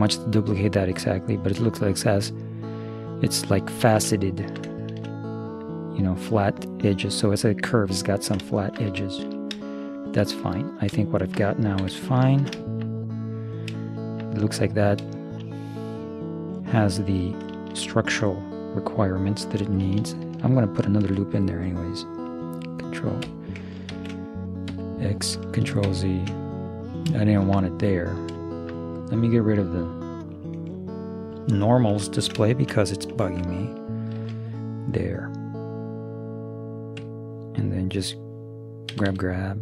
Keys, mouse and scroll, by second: 3.7-6.5 middle drag, 8.0-11.8 middle drag, 11.8 z, 12.0-17.3 middle drag, 17.6-20.0 middle drag, 21.0 ctrl+r, 25.9 ctrl+z, 26.5 middle click, 29.6-31.5 middle drag, 31.7-33.3 drag, 34.2 ctrl+r, 38.9 g.